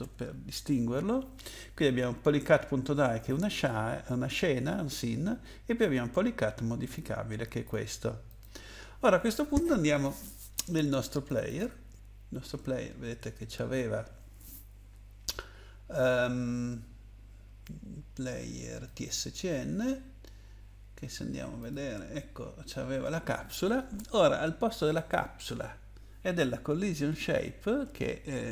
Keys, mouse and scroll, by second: 0.0-0.7 typing, 6.9 click, 7.6 click, 8.3 click, 11.3 click, 11.5 click, 18.8 click, 19.0 click, 21.6 click, 25.0 click, 27.1 shift+Up.